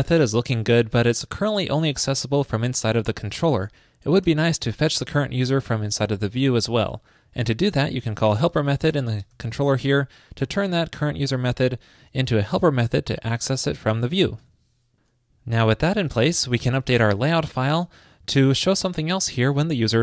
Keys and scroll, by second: 14.5 super+s.